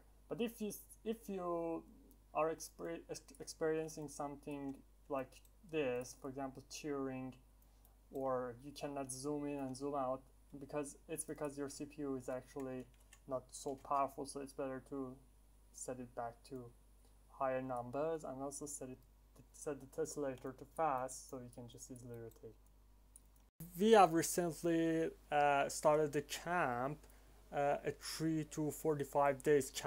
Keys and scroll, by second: 12.4-13.3 typing, 13.7 Return.